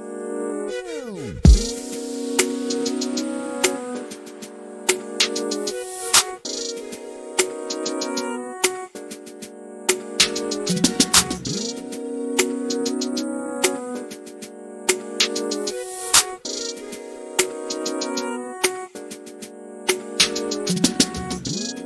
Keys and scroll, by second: 8.1 m, 14.3 m, 18.2 s, 19.8 m.